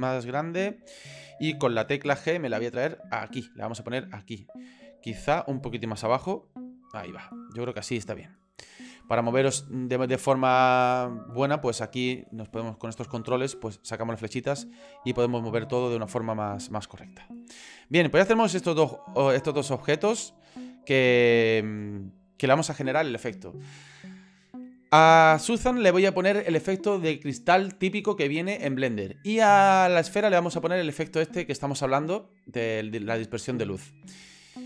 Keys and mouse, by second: 0.4-1.4 middle drag, 2.1 g, 3.7 middle click, 5.3 middle click, 6.1 g, 7.1-8.2 middle drag, 14.2-15.5 drag, 15.9-17.0 drag, 17.5 middle click, 18.9 middle click, 23.1 middle click.